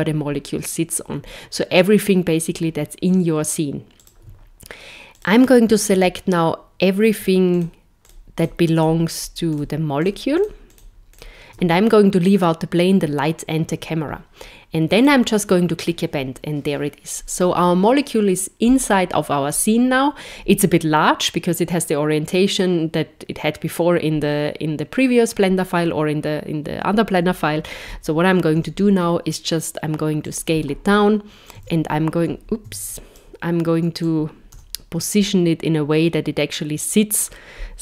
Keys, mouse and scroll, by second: 28.5 s, 31.5 click, 34.0 click.